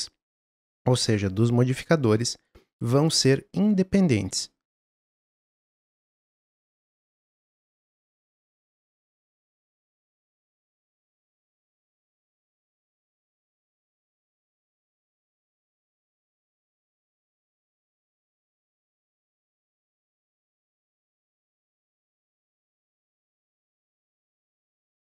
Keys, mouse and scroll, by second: 4.7 click, 5.5 click, 6.0 ctrl+z, 6.4 shift+click, 6.9 s, 7.5 click, 8.2 click, 9.2 click, 9.4 g, 9.8 click, 10.0 s, 10.3 g, 11.1 click, 11.6 g, 12.4 s, 12.9 g, 13.5 click, 14.1 click, 15.1 click, 15.7 s, 16.5 shift+d, 17.2 x, 17.4 click, 17.6 alt+d, 18.6 click, 19.6 click, 20.4 s, 20.9-21.4 middle drag, 21.4 scroll up 1, 21.5 scroll down 1, 21.6 shift+middle click, 22.1 click, 23.4 shift+middle click, 24.0 click, 24.2 shift+d, 24.7 click.